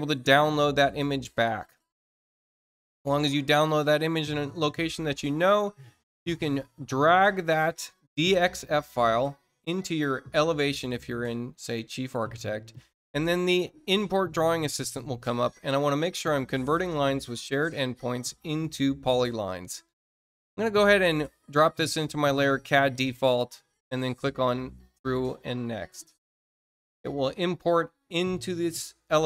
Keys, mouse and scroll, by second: 0.0 click, 2.7 click, 6.3-10.8 drag, 14.2 click, 16.2 click, 18.3 click, 19.8 click, 22.6 click, 23.7 click, 24.3 click, 28.5-29.2 drag.